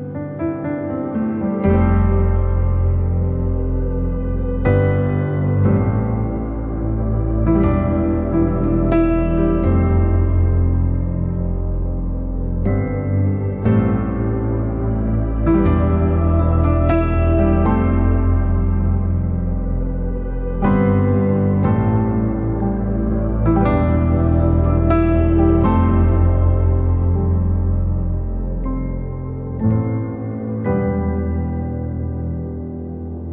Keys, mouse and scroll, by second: 0.6-2.3 drag, 2.3 f, 3.7-5.3 drag, 5.3 middle click, 6.0-7.8 drag, 7.8 scroll down 1, 11.9 m, 13.0-15.2 drag, 15.2 f, 17.6-25.2 drag, 26.1-33.3 drag.